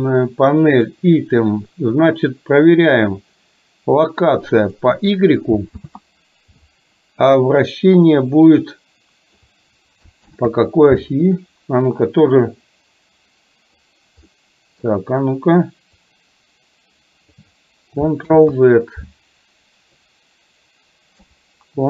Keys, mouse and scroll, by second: 0.9 click, 4.3 click, 5.9 ctrl+z, 8.7 click, 10.3 ctrl+z, 11.9-13.8 drag, 14.4 middle click, 16.0-17.5 drag, 18.3 ctrl+z, 20.0-21.3 drag.